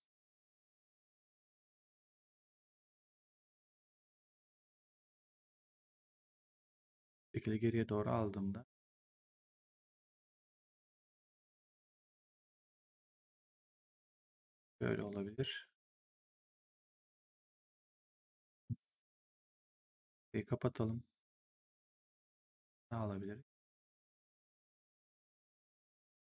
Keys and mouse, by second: 0.6 click, 3.6 click, 7.0 click, 14.9 right click, 15.9 click, 19.9 click, 22.2 click.